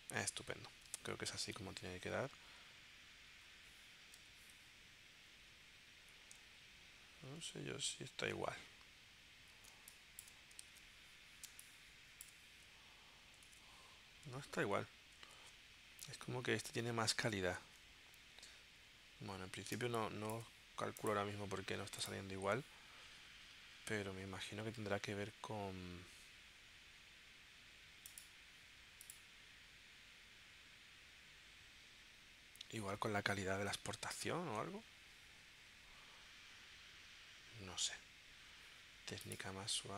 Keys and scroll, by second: 1.0 super+Tab, 7.4 super+Tab, 9.7 space, 11.5 space, 17.2 super+Tab, 19.8 space.